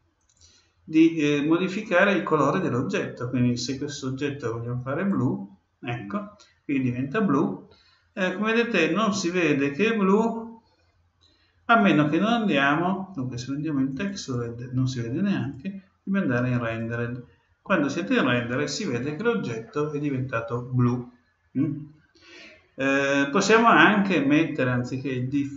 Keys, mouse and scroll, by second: 0.1-2.1 drag, 11.7-13.5 drag, 15.4-17.3 drag.